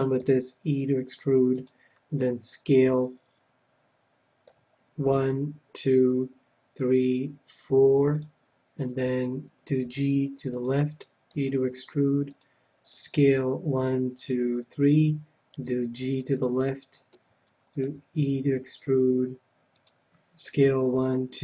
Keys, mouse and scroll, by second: 0.2 e, 1.6-3.6 drag, 4.4 s, 8.2-10.1 drag, 9.8 g, 10.6-14.1 drag, 11.3 e, 12.9 s, 14.9-18.0 drag, 15.5 g, 16.6-18.3 middle drag, 17.8 e, 19.8-21.4 drag, 20.4 s.